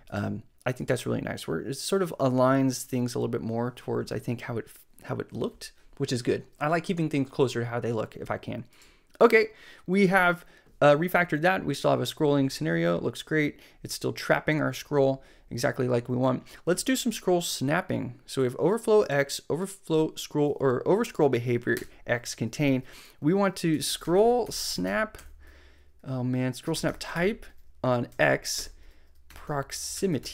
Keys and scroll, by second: 21.7 Return, 23.5-30.3 typing.